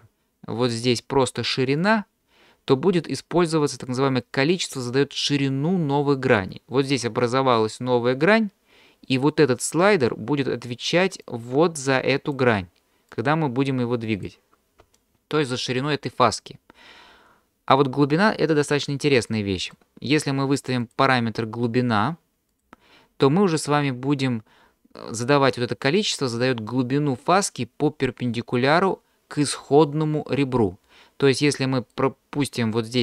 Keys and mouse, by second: 0.6-1.9 drag, 11.3-12.4 drag, 13.2-14.3 drag, 14.8 d, 15.0 click, 15.9 d, 19.3 shift+click, 20.8-22.6 drag, 31.4 middle click, 31.8 click, 31.8 right click.